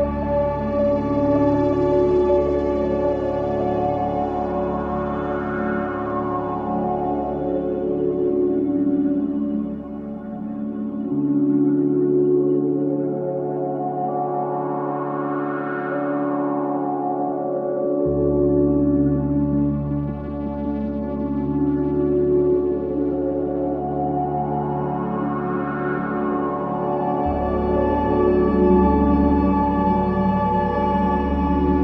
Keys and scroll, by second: 0.1 ctrl+z, 1.4 ctrl+z, 2.8 Delete, 3.2 Delete, 4.2 ], 4.9 ctrl+z, 6.9 Delete, 7.8 Delete, 8.6 Delete, 9.3 ], 16.6 ctrl+z, 23.3 ctrl+z, 24.5 ], 30.4 ].